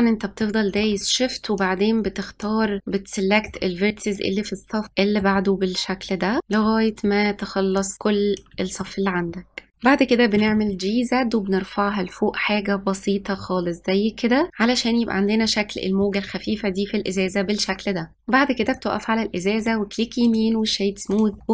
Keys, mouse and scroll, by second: 0.0 shift+click, 0.4 middle click, 1.0 middle click, 1.7 middle click, 2.0 shift+click, 2.4 middle click, 2.8 shift+click, 3.0 middle click, 3.3 shift+click, 3.8 middle click, 4.1 shift+click, 4.4 middle click, 4.7 shift+click, 5.1 middle click, 5.4 shift+click, 5.8 middle click, 6.2 shift+click, 6.6 middle click, 6.8 shift+click, 7.2 middle click, 7.4 shift+click, 8.3 middle click, 8.9 scroll down 1, 9.1 middle click, 9.3-9.8 scroll up 2, 9.4 middle click, 9.8-11.4 middle drag, 11.4 g, 14.6 click, 15.1-15.8 scroll down 4, 15.8 middle click, 16.6-17.2 scroll up 1, 17.2 click, 18.1-18.7 scroll up 1, 18.7 click, 19.6-21.1 right drag, 21.1 click, 21.4 middle click.